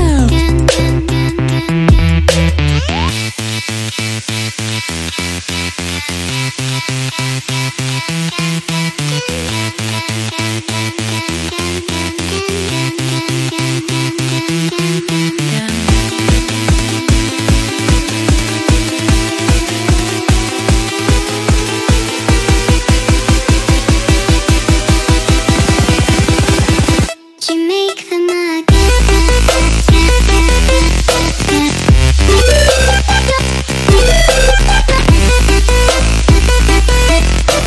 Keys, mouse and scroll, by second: 1.4 click, 1.8 ctrl+click, 2.0 ctrl+click, 2.6 ctrl+click, 2.8 ctrl+click, 3.8 click, 4.0 click, 5.5 click, 6.3 click, 7.9 click, 8.8 click, 10.3 click, 13.9 click, 16.6 click, 18.3 click, 20.2 click, 21.9 click, 23.7 click, 23.9 click, 25.0 ctrl+click, 25.4 ctrl+click, 25.7 ctrl+click, 25.9 ctrl+click, 26.8 click, 28.1 click, 30.9 click, 32.0-33.4 drag, 33.1 typing, 33.2 Tab, 35.8-37.6 typing.